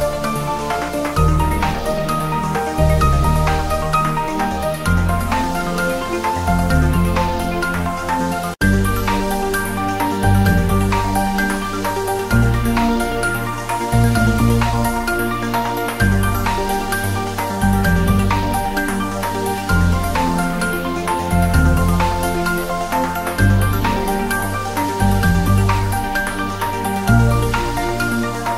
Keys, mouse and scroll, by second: 1.5 click, 2.7 click, 3.8-4.4 scroll down 1, 4.4 click, 4.8-5.7 scroll down 1, 6.8-7.2 click, 10.0 scroll down 1, 10.3-10.6 click, 11.5 click, 11.7-12.4 scroll down 1, 12.6 shift+a, 13.1 click, 13.8 click, 14.2 scroll up 1, 14.7 drag, 18.6-19.0 scroll down 1, 19.9 g, 20.9 click, 22.0-22.8 click, 22.9 scroll up 1, 24.9-25.7 click, 25.8 scroll down 1, 26.3-26.7 click, 26.8 scroll up 1, 28.2 click.